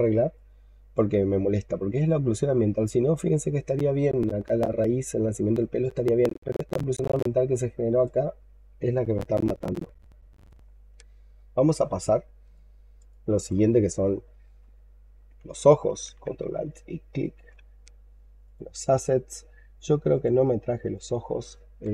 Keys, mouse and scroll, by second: 0.2 alt+click, 1.4-2.4 scroll up 6, 2.4-3.4 scroll up 7, 7.1 alt+click, 11.3-12.3 scroll down 15, 12.4 alt+click, 13.0 alt+click, 13.7 alt+middle click, 15.0-15.8 scroll up 7, 17.0 ctrl+alt+right click, 21.5-21.9 typing.